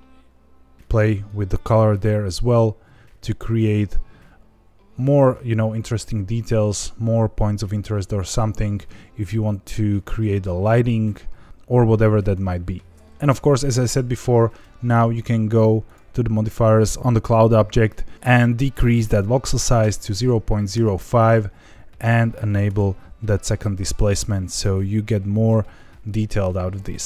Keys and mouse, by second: 12.5 ctrl+z, 13.6 click, 18.5-21.0 drag, 22.9 click.